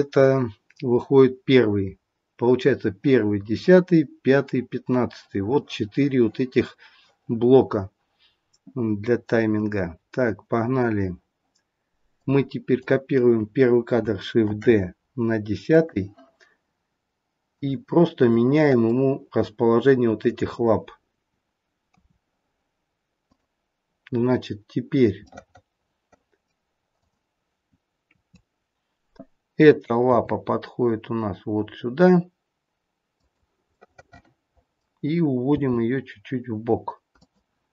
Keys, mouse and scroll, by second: 12.1 click, 14.4 shift+d, 18.3 click, 18.3 middle click, 20.3 click, 21.8 KP_3, 25.2 middle click, 27.0 click, 28.1 KP_3, 30.1 g, 33.7 middle click, 35.4 g.